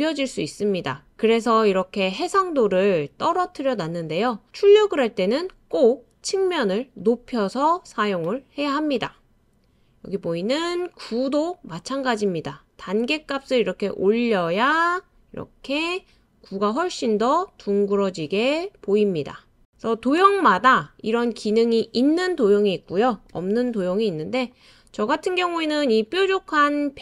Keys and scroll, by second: 22.4 BackSpace.